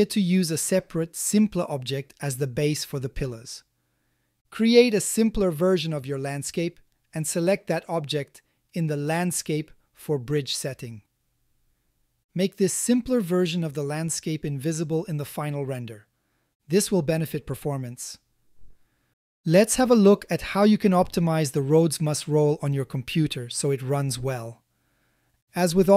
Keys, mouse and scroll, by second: 1.6 g, 1.7 z, 4.4 ctrl+alt+z, 5.7 click, 7.2 click, 8.9 click, 11.5 a, 11.7 a, 12.3 ctrl+alt+z, 13.0 click, 13.5 g, 13.8 z, 18.6 click, 19.6-21.2 ctrl+middle drag, 21.7 click, 22.3-23.0 shift+middle drag, 23.9 a, 24.3 shift+middle click, 25.7-25.9 drag.